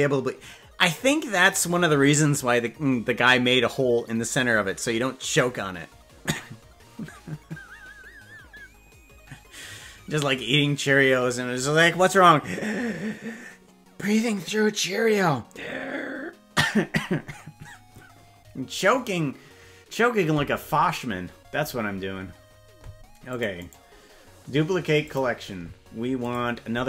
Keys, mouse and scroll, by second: 23.2 click, 23.7-25.3 right drag, 26.2 click.